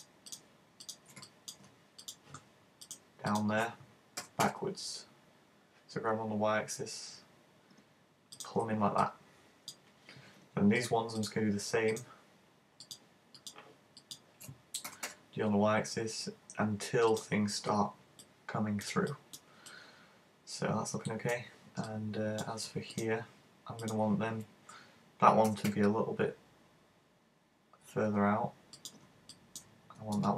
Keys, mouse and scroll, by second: 0.0 shift+right click, 0.4 shift+right click, 0.9 shift+right click, 1.2 middle click, 2.1 shift+right click, 2.8 shift+right click, 3.3 shift+right click, 9.1 middle click, 10.9 right click, 11.3 shift+right click, 12.0 shift+right click, 12.9 shift+right click, 13.4 shift+right click, 14.0 shift+right click, 14.9 g, 17.3 click, 18.2 middle click, 19.1 middle click, 21.9 middle click, 23.0 right click, 23.9 shift+right click, 25.5 g, 28.9 click, 29.3 right click, 30.0 super+space.